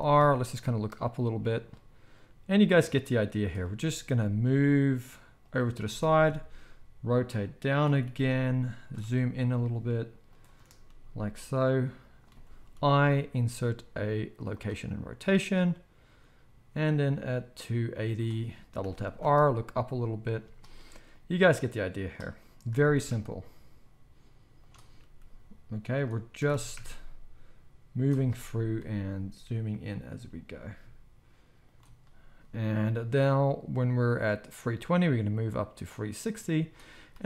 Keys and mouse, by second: 1.4-2.1 shift+middle drag, 4.2 g, 5.5-7.2 middle drag, 5.9 r, 7.2-15.4 shift+right drag, 8.0 g, 9.0 g, 10.8 g, 12.7 i, 18.8 r, 20.3-21.1 shift+middle drag, 22.7 r, 23.8 shift+middle click, 24.6-36.6 shift+right drag, 25.0 g, 26.4 r, 28.3 g, 30.1 g, 34.7-36.6 drag, 34.7-37.2 middle drag.